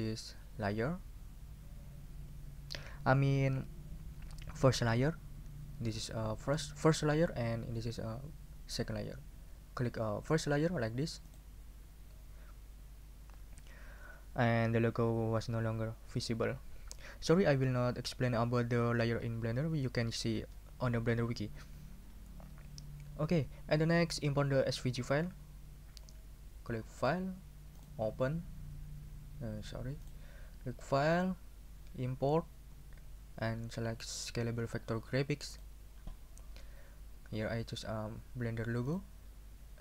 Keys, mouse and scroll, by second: 11.3 click, 27.0 click, 27.8 click, 30.0 click, 31.1 click, 35.5 click, 38.8 click.